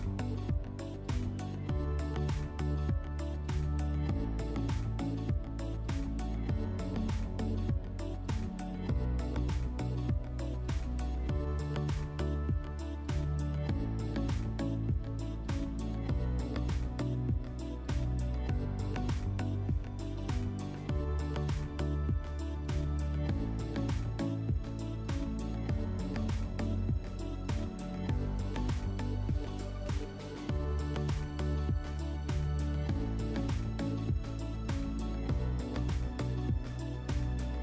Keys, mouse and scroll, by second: 0.3 click, 1.5 click, 2.8 click, 3.0 click, 3.9 1, 5.8 click, 7.2 click, 8.2 click, 9.9 click, 10.9 click, 11.1 click, 11.3 6, 11.9 click, 12.1 click, 12.2 6, 13.8 click, 17.5 click, 21.3 click, 22.1 ctrl+z, 22.9 click, 27.3 click, 30.4 alt+middle click, 32.3 F4, 37.1 click.